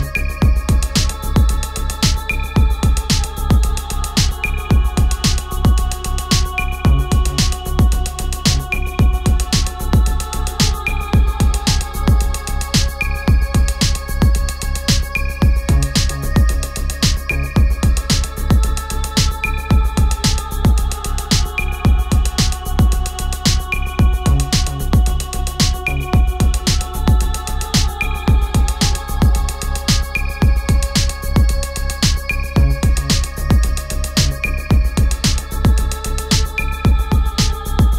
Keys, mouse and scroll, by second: 1.0-1.4 scroll down 1, 4.2 click, 6.3 typing, 7.6-12.1 typing, 13.5-17.6 drag, 23.9 click, 27.5-28.9 drag, 28.9 ctrl+z, 30.3-33.9 drag, 33.9 ctrl+z, 35.2-37.9 drag.